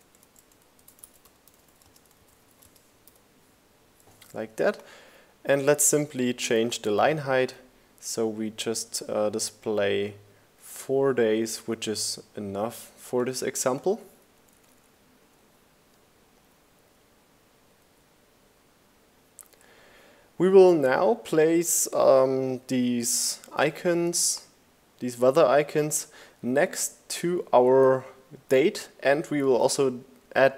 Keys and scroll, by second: 0.0-0.5 typing, 11.9 Down, 15.4 Down.